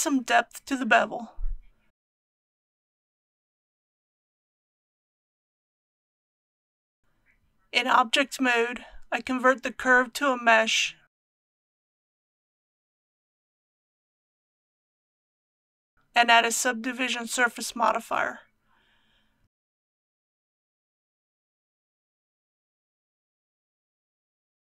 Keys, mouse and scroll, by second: 2.8 scroll down 1, 5.5 click, 7.1 Tab, 9.6 right click, 15.1 click.